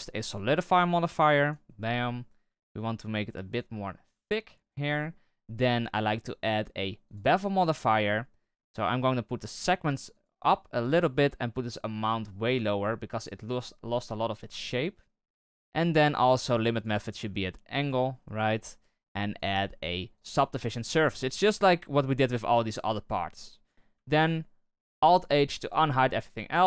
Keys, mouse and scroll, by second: 1.7-2.1 middle drag, 2.1-2.5 scroll up 1, 2.5-3.5 shift+middle drag, 3.5-4.9 drag, 4.9-5.9 middle drag, 5.9-7.5 drag, 7.5-10.1 scroll down 7, 10.1-13.7 drag, 13.7-15.2 middle drag, 15.2-16.7 scroll down 1, 16.7-18.3 drag, 18.3-19.3 scroll up 10, 19.3-20.6 drag, 20.6-22.2 scroll down 14, 22.2 click, 22.8-23.7 middle drag, 23.7 w, 24.9 alt+h, 25.6 right click, 25.9-26.2 scroll down 3, 26.2-26.6 middle drag.